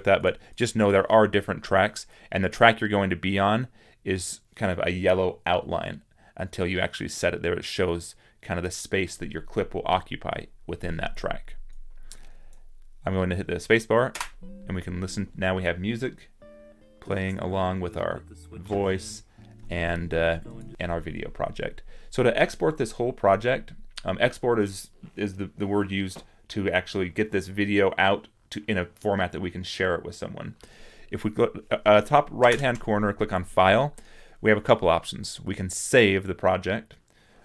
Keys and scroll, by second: 14.1 space.